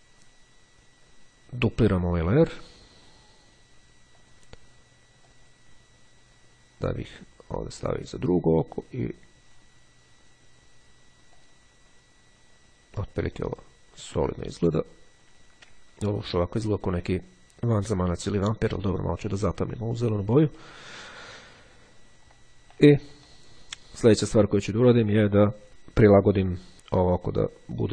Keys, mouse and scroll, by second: 4.1 click, 5.4-8.4 drag, 11.5 click, 16.1-16.6 ctrl+scroll down 2, 16.9-17.5 ctrl+scroll down 2, 19.9-21.5 ctrl+scroll up 2, 22.1-22.6 ctrl+scroll up 2, 22.9-23.9 ctrl+drag, 25.2 click.